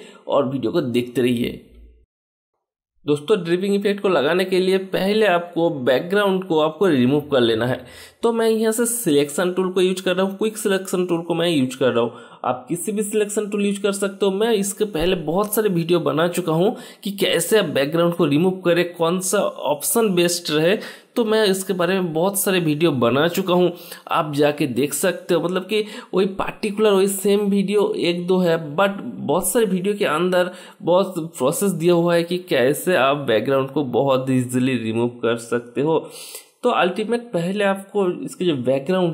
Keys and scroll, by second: 4.9-5.7 typing, 19.6-23.6 typing, 25.1-25.9 typing.